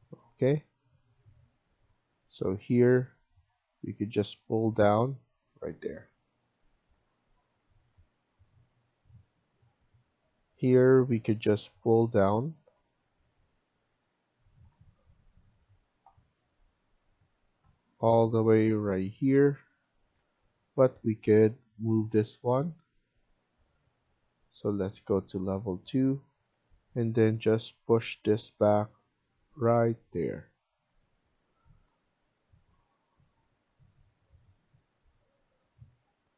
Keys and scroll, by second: 5.6 Escape, 20.1 Escape, 30.2 Escape.